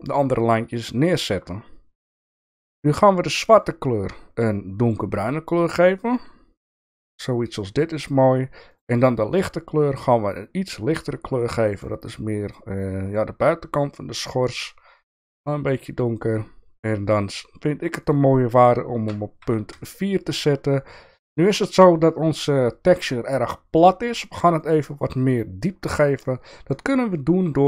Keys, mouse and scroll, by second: 1.0 shift+middle click, 8.7 click, 9.3 click, 18.0-20.5 drag, 25.2 shift+middle click, 26.2 click, 27.1 click.